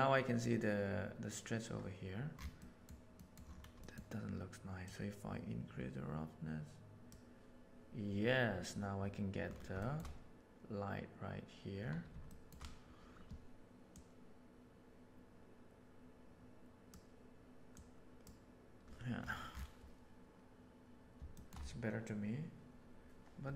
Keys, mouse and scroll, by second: 2.5 middle click, 3.1 middle click, 3.8 middle click, 4.8-7.1 drag, 9.8 shift+middle click, 12.2 shift+middle drag, 14.0-16.9 drag, 17.7-18.2 drag.